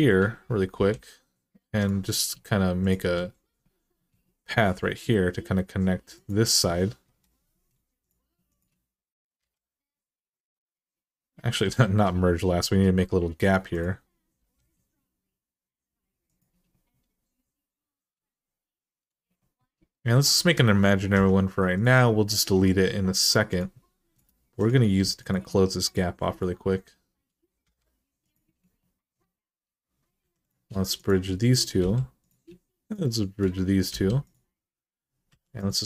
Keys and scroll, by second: 0.5 k, 6.8 Return, 9.2 m, 14.2 g, 20.9 k, 23.9 Return, 27.4 m, 30.0 2, 31.6 f, 33.7 f, 35.1-35.8 typing.